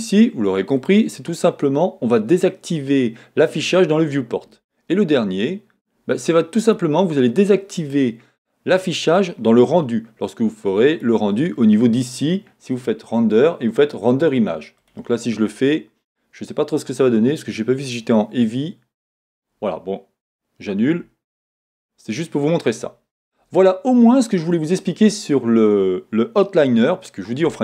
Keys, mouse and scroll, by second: 4.4 click, 10.9 click, 21.8 Escape.